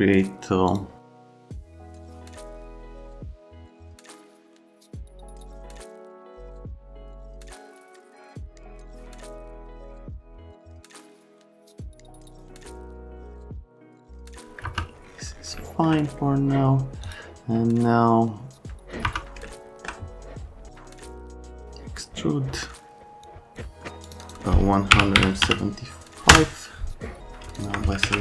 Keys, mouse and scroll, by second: 3.1 middle click, 3.4 ctrl+click, 3.5 right click, 3.9 F3, 4.3 ctrl+click, 4.7 ctrl+click, 4.7-5.5 typing, 5.1 click, 6.0 F3, 6.1 F3, 6.7 click, 6.9 w, 7.2 click, 7.4 right click, 7.5 click, 7.6 right click, 7.9 click, 8.2 click, 8.5 scroll up 1, 8.6 click, 8.8 click, 9.2 click, 9.6 click, 10.0 right click, 10.6 click, 10.8 right click, 11.1 click, 11.6 middle click, 12.2 F3, 12.4 click, 12.7 click, 13.1 F3, 13.1 click, 13.5 click, 13.8 click, 14.1 middle click, 14.6 F3, 15.6 alt+middle click, 17.0 click, 19.1 F3, 19.4 alt+right click, 20.5-21.3 typing, 21.4 click, 23.2 click, 24.0 click, 24.2 click, 24.9 KP_1, 25.1 KP_7, 25.4 KP_5, 26.3 KP_Enter, 28.0 alt+q.